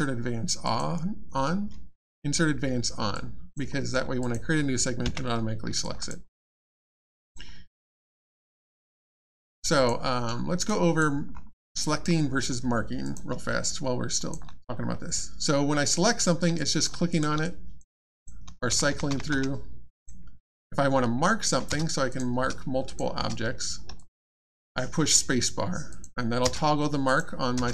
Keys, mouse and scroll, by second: 0.6 click, 3.1 alt+click, 3.7 alt+middle click, 4.2 middle click, 4.2 click, 5.8 alt+click, 6.3 alt+middle click, 6.9 alt+click, 7.5 alt+middle click, 7.7 alt+scroll down 1, 8.1 alt+click, 9.0 alt+scroll up 1, 9.3 alt+click, 10.1 alt+middle click, 10.7 alt+click, 11.3-11.7 alt+scroll up 1, 11.7 alt+click, 13.0 click, 13.6 alt+click, 15.9 click, 16.5 alt+click, 17.1 click, 17.1 click, 17.4 alt+click, 18.1 click, 18.2 click, 18.4 alt+x, 19.9 click, 21.7 space, 22.1 click, 22.4 space, 22.8 click, 23.2 space, 23.9 alt+click, 25.9 click, 26.4 space, 27.0 click, 27.5 space.